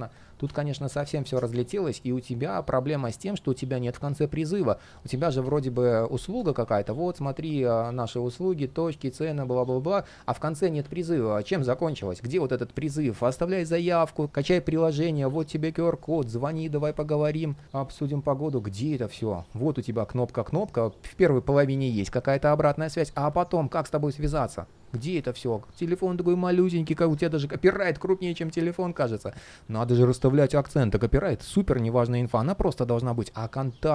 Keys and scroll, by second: 13.6 super+z, 24.4 super+z.